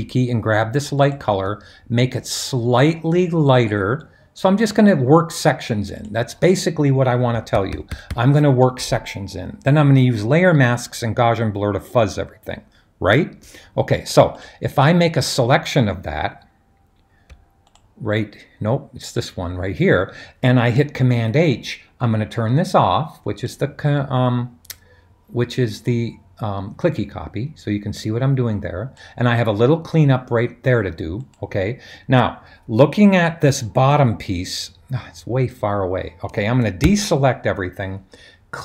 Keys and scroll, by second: 7.3-8.1 typing, 20.9 super+h, 36.9 super+d, 36.9 super+s.